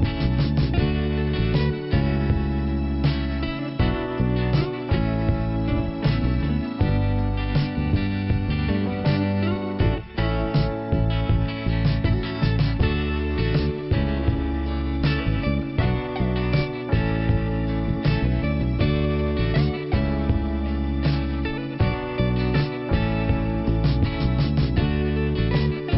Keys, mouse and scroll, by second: 0.2 click, 2.0 click, 2.1 click, 3.3 click, 4.3-5.0 scroll down 1, 5.3 p, 7.9 middle click, 8.6-8.9 scroll down 1, 8.9 click, 10.3 middle click, 13.0-13.6 scroll down 1, 14.0 click, 16.4 click, 18.4 click, 19.4 right click, 20.0 click, 21.8 right click, 23.2 click.